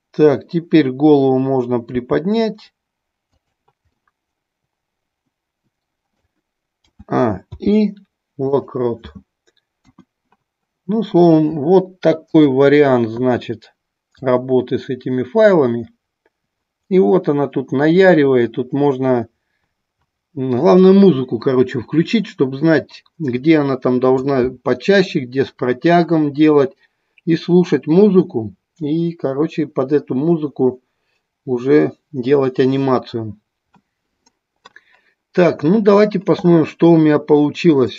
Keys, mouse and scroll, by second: 1.9 r, 3.5 drag, 4.0-6.4 middle drag, 12.4 click, 14.4-24.5 drag, 37.9 click.